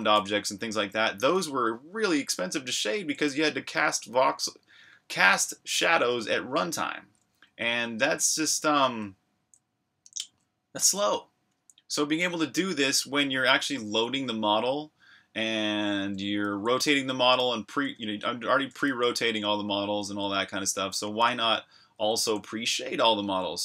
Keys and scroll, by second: 0.0-0.4 typing, 4.7-6.2 typing, 8.3-9.0 typing, 11.6 j, 12.7-14.1 typing, 15.7-16.2 typing, 19.7-23.6 typing.